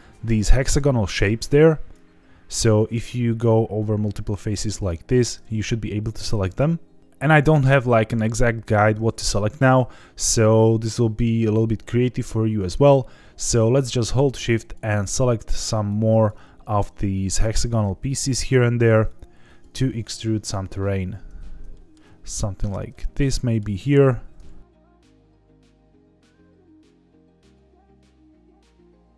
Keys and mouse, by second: 1.3 click, 3.4 click, 8.7 middle click, 14.5 shift+click, 15.9 shift+click, 17.1 middle click, 18.0 shift+click, 19.1 shift+click, 21.7 middle click, 22.3 shift+click, 22.9 middle click, 24.4 ctrl+z, 26.0 middle click, 26.5 shift+click, 26.9 middle click, 27.4 shift+click, 27.7 shift+click, 28.0 shift+click, 28.5 shift+click, 28.7 middle click, 29.0 shift+click.